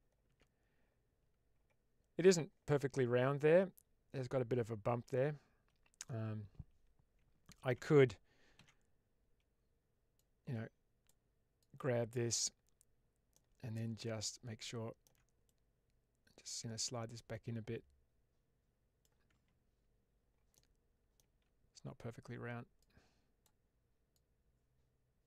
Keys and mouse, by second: 2.7 Tab, 4.9 Tab, 5.9-7.6 middle drag, 8.5 alt+z, 10.1 click, 11.5 click, 13.2-14.9 middle drag, 15.4-18.9 drag, 19.2 Tab, 20.4 middle click, 21.1 Tab, 22.7 click, 24.0-25.2 drag.